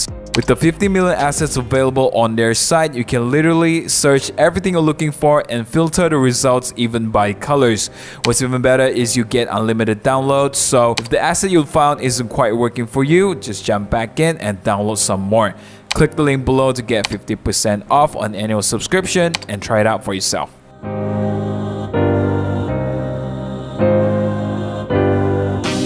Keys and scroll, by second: 21.6 super+t, 21.7 Return, 21.7 v, 21.8 super+0, 22.2 super+t, 22.3 super+1, 22.4 super+=, 22.6 super+z, 22.8-25.0 typing.